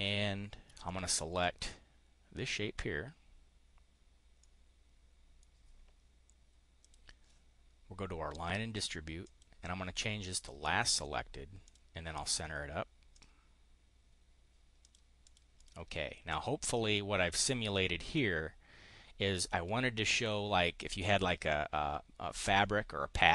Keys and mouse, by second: 0.7 shift+click, 4.3-5.3 drag, 6.7 click, 8.3 click, 9.2 click, 10.3 click, 11.6 click, 13.1 click, 14.8 click, 15.0 click, 15.4 click, 16.5 click, 17.3 click, 20.1 click.